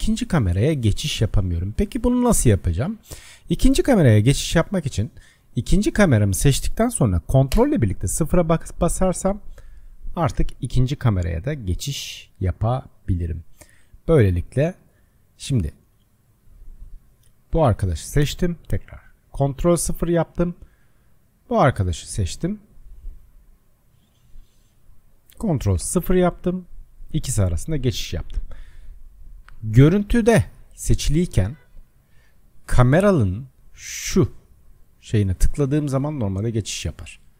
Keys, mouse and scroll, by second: 0.0-2.4 typing, 5.3-7.6 drag, 7.6 ctrl+KP_0, 8.9-10.3 middle drag, 10.3 scroll up 1, 10.5-11.4 scroll down 12, 11.4-14.4 middle drag, 17.6 click, 18.6 ctrl+KP_0, 24.2-24.9 scroll up 1, 24.9 click, 25.8 ctrl+KP_0, 29.2 click, 29.9 click, 31.3 click, 31.7 click, 33.0 click, 33.9 click, 35.1 click, 36.0 click.